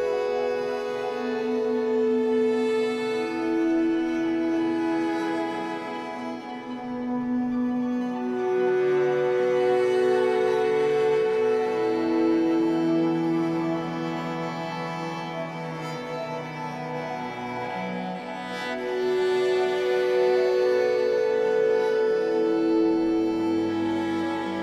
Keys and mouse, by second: 0.0 3, 1.2-2.6 drag, 3.0 shift+s, 3.8 click, 6.7 click, 10.5 shift+s, 12.0 click, 14.9 click, 16.2 click, 16.6 click, 17.5-19.1 alt+drag, 19.5-19.8 ctrl+alt+drag, 20.7 alt+a, 21.2 typing, 21.5-22.1 drag, 22.9 typing, 23.7-24.1 drag.